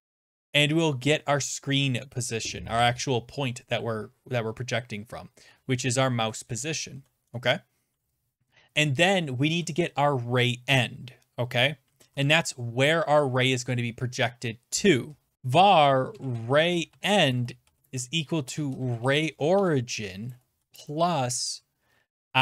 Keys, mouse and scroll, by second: 0.0 Return, 4.5-6.0 typing, 6.5 Return, 6.9 Right, 7.3 Return, 11.6-12.6 typing, 15.9-21.1 typing.